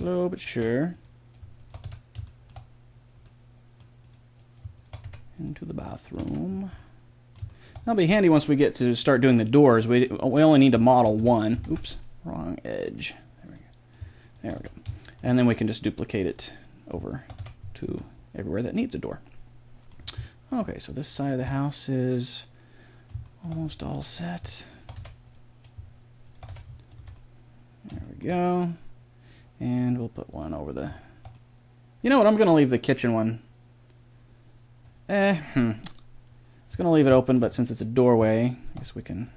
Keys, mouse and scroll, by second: 1.8 f, 3.3 middle click, 4.0-6.3 right drag, 5.0 f, 6.3 f, 6.5 middle click, 10.2 click, 10.9-11.9 right drag, 11.2 f, 11.6 ctrl+z, 14.5 f, 17.4 f, 17.9 a, 18.3 middle click, 18.5 middle click, 19.3 middle click, 20.0 middle click, 20.2 middle click, 20.6 middle click, 20.8 middle click, 21.9-23.3 middle drag, 23.5-24.9 middle drag, 24.9 f, 26.5 f, 26.6 middle click, 26.9 a, 27.1-28.5 middle drag, 29.4 middle click, 29.7 middle click, 32.3-34.4 middle drag, 37.2-39.3 middle drag.